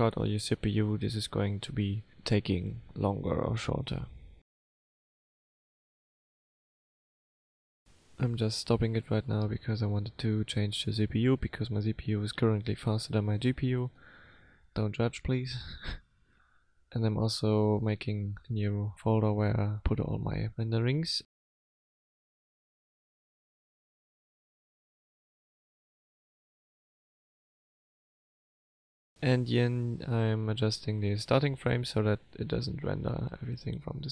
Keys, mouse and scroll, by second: 16.8 click, 30.0 click.